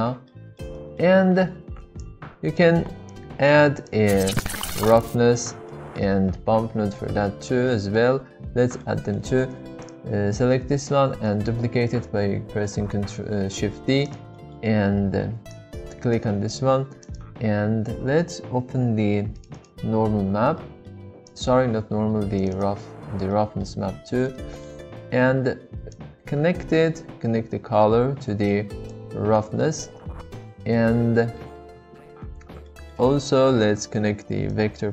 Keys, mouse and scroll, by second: 0.3-0.6 middle drag, 0.7 shift+middle click, 2.0 click, 3.2 g, 5.7 middle click, 7.1 middle drag, 7.8 middle click, 8.9 middle click, 9.8 click, 11.2 shift+d, 14.0 click, 14.5 middle click, 15.5 click, 17.1 click, 20.5 middle click, 21.3 click, 23.3 middle click, 24.4 middle click, 26.0-29.0 drag, 29.7 middle click, 30.4-31.7 middle drag, 32.7 middle click, 34.5-34.9 drag.